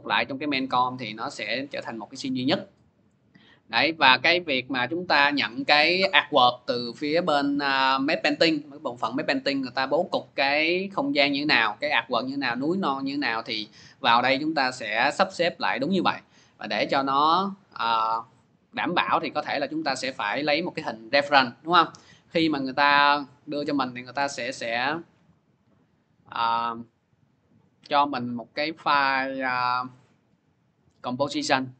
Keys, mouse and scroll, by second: 14.2-17.5 drag, 19.9 click, 20.1 click, 22.7-23.7 scroll, 23.7-24.1 scroll, 24.9 click, 27.9 click, 28.1 click, 30.9 click, 31.1 click.